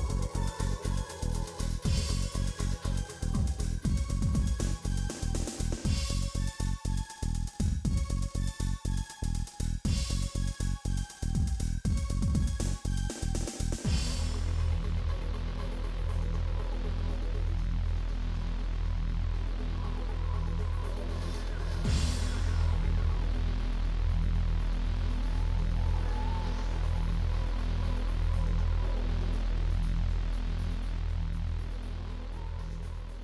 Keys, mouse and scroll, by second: 1.6 middle click, 4.0 alt+click, 5.0 g, 6.3 alt+click, 6.8 g, 8.3 s, 9.2 g, 10.1 3, 10.3 shift+click, 11.2 2, 11.4 click, 12.2 middle click, 13.6 alt+click, 13.8 middle click, 14.9 click, 15.2 KP_1, 15.4-16.1 scroll up 3, 15.5 shift+middle click, 16.1 g, 17.5 alt+click, 17.7 g, 18.7 click, 19.4 s, 20.1 click, 20.6 s, 22.1 shift+middle click, 22.7-23.0 scroll down 2, 23.0 click, 23.5 3, 23.6 shift+click, 24.1 shift+click, 24.4 shift+middle click, 25.1 i, 26.4-27.8 shift+middle drag, 27.8-29.1 drag, 29.1 shift+middle click, 29.5 shift+click, 30.0 KP_7, 30.2 shift+middle click, 30.3 scroll up 6, 30.5 shift+middle click, 30.7 click, 31.0 shift+middle click, 31.1-31.9 scroll up 2, 31.2 shift+middle click, 32.4 g, 33.1-33.2 scroll up 17.